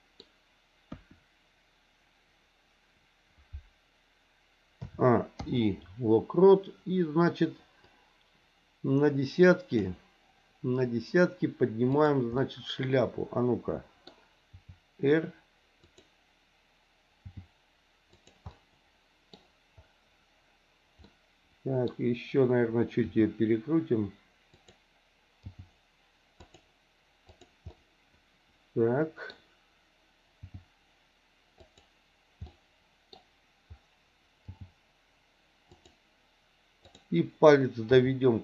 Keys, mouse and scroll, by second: 0.8 KP_1, 4.8 a, 5.4 i, 7.9-9.9 drag, 11.9 click, 12.3-14.0 middle drag, 14.5 r, 17.2 g, 18.5 middle click, 21.1-21.9 scroll up 1, 21.9-23.0 middle drag, 23.0 r, 25.4 g, 27.3 click, 27.7-29.3 middle drag, 30.4 g, 32.6 middle click, 32.6-33.1 scroll up 1, 33.1 scroll down 1, 34.5 g, 36.8 click, 37.8 r.